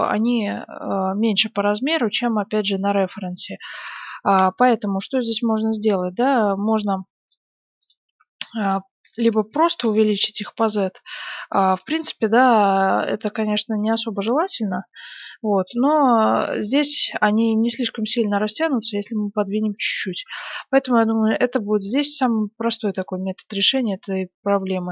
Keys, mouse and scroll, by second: 2.0-4.6 middle drag, 3.8 KP_1, 4.5 z, 5.2-6.2 middle drag, 5.3 Tab, 6.8 Tab, 9.7 s, 9.9-10.9 drag, 12.0 middle click, 12.7-13.7 drag, 12.7 s, 20.1 KP_1, 20.8 middle click, 21.0 z, 24.4 s.